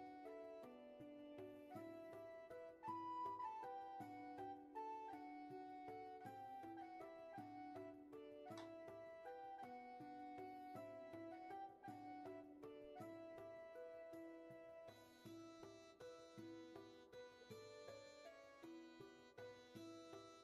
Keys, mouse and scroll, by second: 9.5 ctrl+z, 10.9 ctrl+shift+z, 18.4 ctrl+z.